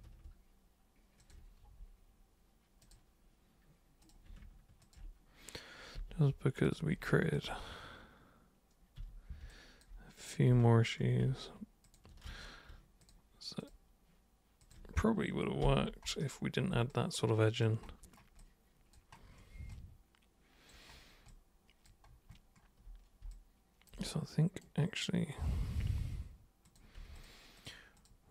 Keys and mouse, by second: 1.2 ctrl+shift+super+click, 2.8 super+click, 4.0 super+click, 4.8 ctrl+shift+super+click, 5.9 super+g, 6.6 super+drag, 7.3 ctrl+shift+super+click, 9.0 super+g, 9.5-9.8 alt+super+drag, 10.1 super+click, 11.8 ctrl+shift+super+click, 12.3 ctrl+super+z, 13.0 ctrl+shift+super+click, 13.6 ctrl+shift+super+click, 14.6 ctrl+shift+super+click, 15.6 super+g, 16.9 alt+super+click, 18.4 alt+super+click, 19.7 alt+super+click, 21.3 alt+super+click, 23.3 alt+click, 24.1 right click, 26.7 click, 27.2 ctrl+shift+click, 27.5 ctrl+shift+click, 28.0 ctrl+shift+click.